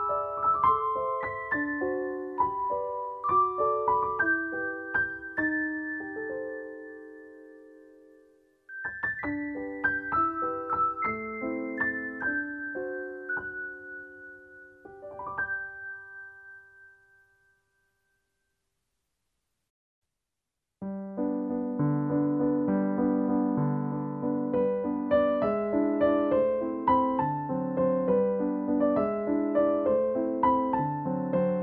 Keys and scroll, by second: 3.2-3.7 scroll up 1, 4.4-5.0 scroll down 1, 6.2 scroll down 1, 6.5 scroll up 1, 7.1 scroll up 1, 10.6 scroll down 1, 11.0-12.0 scroll up 1, 15.2 scroll up 1, 21.2 scroll down 1, 21.4-21.9 scroll up 1, 22.8-23.3 scroll up 1, 24.2 scroll down 1, 28.7 scroll down 1, 28.9 scroll up 1, 30.8 scroll down 1, 31.0-31.4 scroll up 1.